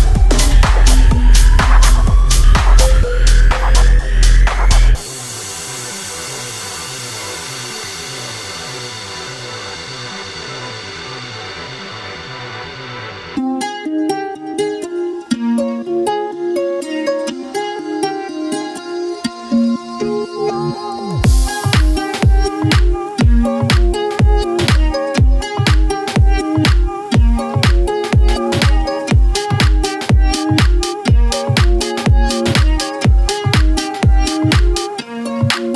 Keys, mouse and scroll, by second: 0.5 click, 2.0 right click, 5.9-14.1 drag, 18.1 click, 18.8 scroll down 1, 19.4 click, 19.8 scroll up 1, 23.8 ctrl+Num_Lock, 23.8-24.4 scroll up 1, 24.4 ctrl+Page_Down, 27.1-27.6 scroll down 1, 27.6 scroll up 1, 28.8 click, 29.4 scroll down 1, 30.2 scroll down 1, 31.8 scroll up 1, 32.3-35.7 drag.